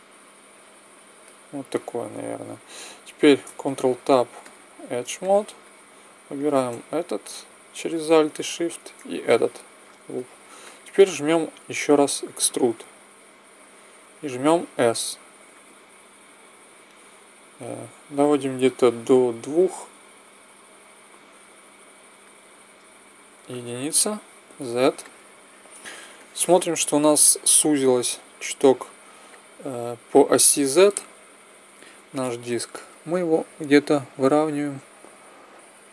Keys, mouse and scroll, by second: 3.4 ctrl+Tab, 8.3 middle click, 9.1 click, 9.4 middle click, 10.3 click, 10.3 middle click, 12.2 e, 23.5 KP_1, 24.4 z, 29.3-35.5 drag.